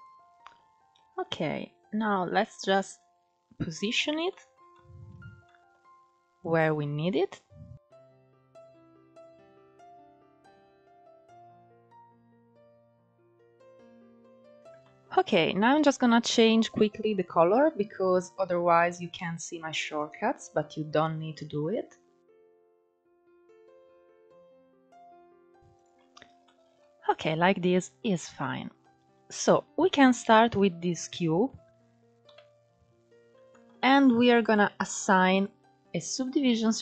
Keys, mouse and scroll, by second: 4.0 shift+middle click, 4.9 scroll down 1, 5.1 middle click, 6.1-7.3 drag, 7.8-8.6 middle drag, 8.6 KP_1, 9.2 scroll up 4, 9.9 scroll down 1, 10.1 s, 11.5 scroll down 5, 11.7-13.9 middle drag, 13.9-14.5 scroll up 3, 14.5 shift+middle click, 14.7-15.3 scroll up 3, 16.4-19.5 middle drag, 20.4-22.3 drag, 22.3 scroll down 5, 22.6 click, 22.9 scroll down 3, 23.1 click, 23.8 KP_1, 24.0 shift+middle click, 24.3 click, 24.6-26.1 drag, 26.1-26.9 shift+middle drag, 26.9-27.2 scroll up 3, 27.2-27.7 scroll down 3, 27.7-28.7 shift+middle drag, 28.7-29.4 scroll down 5, 29.4-29.8 scroll up 3, 29.8 click, 30.2-31.9 middle drag, 31.9 KP_1, 32.6 scroll up 2, 33.2 shift+middle click, 34.1 click, 35.0-36.8 drag.